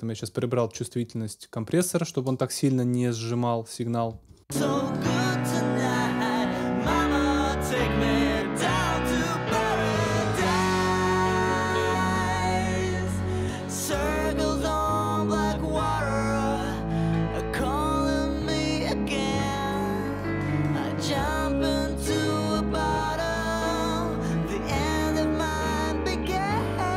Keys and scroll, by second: 4.1 space.